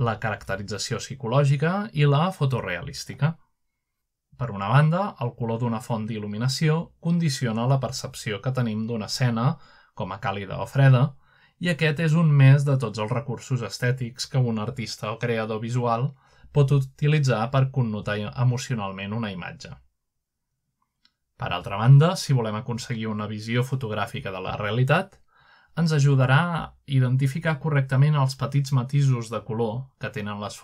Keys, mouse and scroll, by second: 0.0 click, 1.6 middle drag, 2.4-3.0 middle drag, 3.4 click, 4.5-8.0 drag, 9.2 click, 10.8 click, 11.6-15.2 drag, 15.4 drag, 15.7 middle click, 16.3-17.3 middle drag, 17.3-21.2 drag, 21.4-21.8 drag, 21.9-22.6 middle drag, 22.2-22.6 scroll up 1, 23.7-24.4 middle drag, 24.8-25.4 middle drag, 25.7 shift+middle click, 26.6-27.6 middle drag, 27.4-28.3 scroll down 1, 27.9-29.2 middle drag, 29.4-29.8 middle drag, 29.6-30.6 scroll up 1.